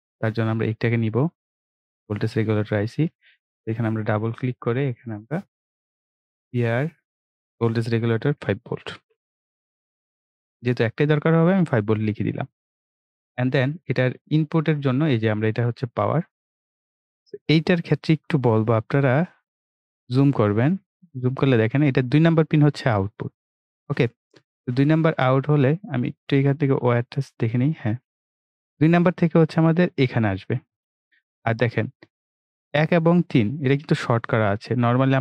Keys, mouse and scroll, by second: 9.0 shift+v, 9.9 Return, 11.5 click, 15.1-18.7 drag, 19.3-19.7 ctrl+scroll up 1, 20.8-24.3 right drag, 25.6-27.2 drag.